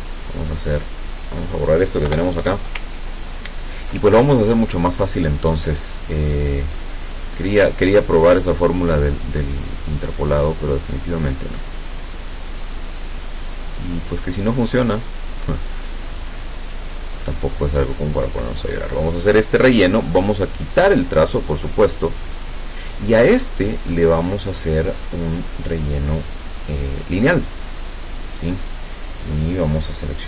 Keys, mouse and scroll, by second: 0.0-1.6 drag, 2.2 Delete, 3.2-3.7 ctrl+scroll up 2, 7.2 click, 11.0 click, 11.8-13.1 drag, 14.9 click, 16.9 click, 18.2 click, 20.8 click, 21.6 click, 22.4 click, 23.4 click, 25.7 click.